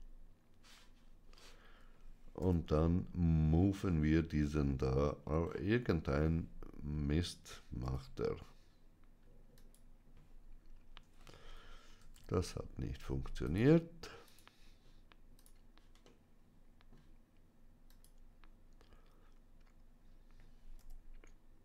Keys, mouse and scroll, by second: 2.3 m, 5.1 scroll down 1, 7.7 m, 9.4 click, 12.0 ctrl+z, 13.3 click, 15.9-16.9 middle drag, 17.7-19.8 drag, 20.7 m.